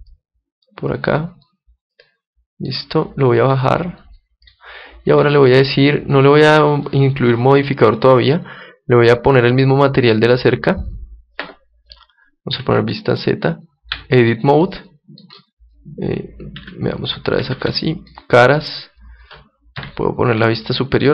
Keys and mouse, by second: 1.3 middle click, 1.8-3.4 middle drag, 3.4-6.9 drag, 9.0-11.7 drag, 12.5 z, 13.9 Tab, 14.6-17.8 middle drag, 16.5 z, 17.5 ctrl+Tab, 18.5 ctrl+Tab, 18.6-20.5 right drag, 19.7 KP_7, 20.5 middle click, 20.7-21.1 middle drag.